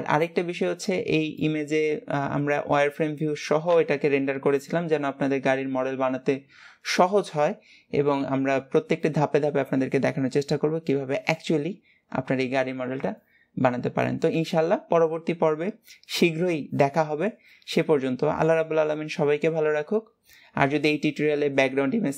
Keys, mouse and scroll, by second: 1.6-3.0 middle drag, 3.0 scroll up 4, 3.9 KP_1.